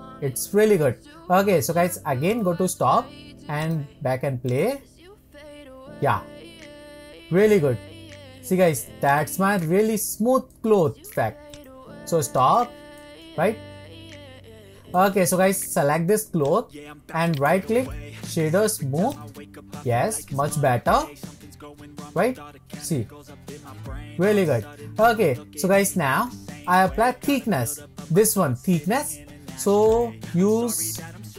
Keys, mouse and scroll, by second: 2.6-5.6 drag, 5.6-6.6 scroll up 2, 9.8 click, 10.6-11.8 shift+middle drag, 11.8 click, 12.5-16.2 shift+middle drag, 16.4 click, 17.3-20.1 right drag, 20.1-23.7 shift+middle drag, 24.8 shift+middle click, 25.3-26.3 scroll up 2, 26.3-27.7 shift+middle drag, 27.7-28.6 scroll up 2, 28.6-29.9 scroll up 1, 29.9 click, 30.9-31.3 drag.